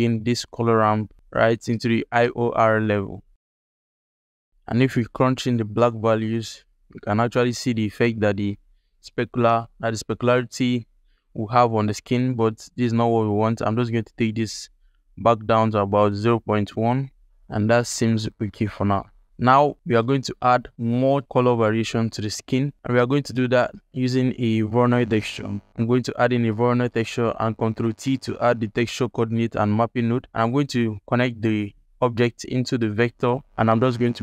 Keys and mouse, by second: 0.0-3.2 drag, 5.1-8.0 drag, 13.8 click, 17.9 ctrl+alt+middle click, 18.1 ctrl+click, 20.5 ctrl+alt+click, 22.7 alt+shift+click, 23.1 ctrl+alt+click, 23.5 alt+shift+click, 23.5 alt+shift+middle click, 23.9 click, 23.9 middle click, 24.3 shift+a, 26.4 click, 27.5 ctrl+t, 28.1 alt+click, 28.6 ctrl+alt+click, 31.6-32.8 drag.